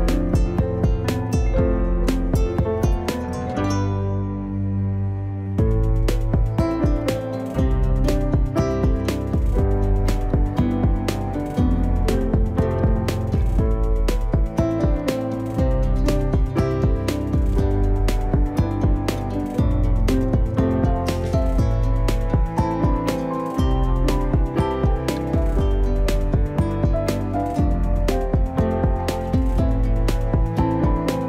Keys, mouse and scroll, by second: 0.6 click, 3.4 click, 9.6 click, 11.6-12.7 drag, 12.7 click, 15.9 click, 22.6-25.0 drag, 27.4-29.0 drag.